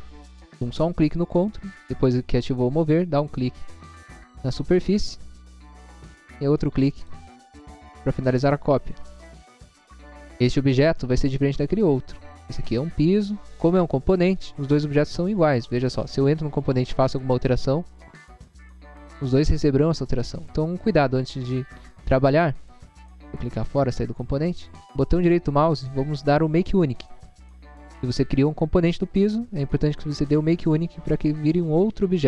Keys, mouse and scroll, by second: 3.2 click, 3.6 scroll down 1, 4.2 scroll down 1, 7.0 click, 7.8 scroll up 1, 8.4 scroll up 1, 10.0 click, 15.6 click, 15.8 click, 15.9 click, 16.9 p, 17.3 click, 20.8 Escape, 21.5 space, 23.0 click, 24.9 right click, 27.2 click.